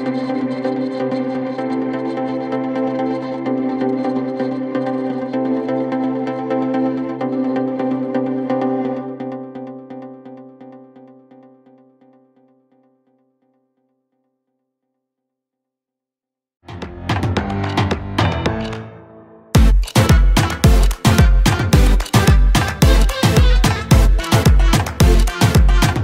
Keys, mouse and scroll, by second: 2.9 middle click, 3.7 right click, 5.4-5.7 scroll up 2, 6.5 right click, 8.7 scroll down 1, 9.7 scroll down 2, 9.8 scroll up 2, 10.1 right click, 11.6-12.1 scroll down 2, 12.8 scroll down 5.